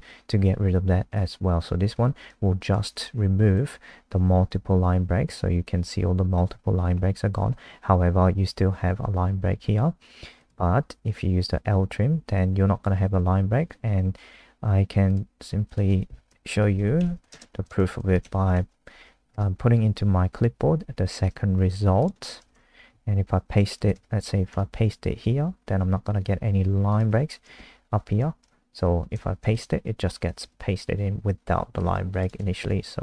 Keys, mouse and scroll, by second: 3.0 F5, 10.3 click, 16.0-18.0 typing, 18.2 ctrl+s, 18.5 F5, 19.3 Return, 22.0 click, 22.4 Return, 22.5 Return, 23.8 BackSpace, 23.9 BackSpace, 24.5 Return, 25.2 ctrl+v, 26.9 click, 27.4 Return, 28.2 Down, 28.4 Up, 28.7 Down, 29.0 Up, 30.5 ctrl+v, 32.2 click, 32.8 Left.